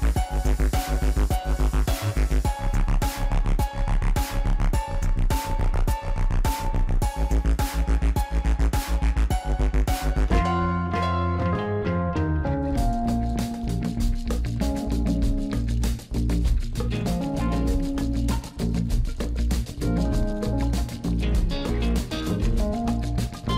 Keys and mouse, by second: 0.4 Tab, 0.6 Tab, 1.1 click, 1.7 click, 5.5 click, 6.0 click, 7.0 Tab, 7.4 Tab, 11.2-12.8 drag, 12.7 ctrl+z, 15.2 click, 16.3 click, 17.0 click, 17.5 Tab, 18.3 click, 19.1 click, 19.8 click, 20.5 middle click, 22.7 click.